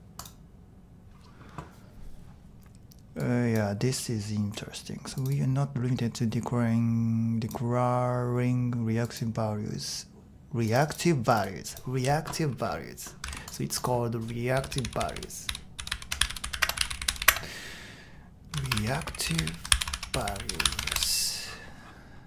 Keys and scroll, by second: 14.3-21.9 typing.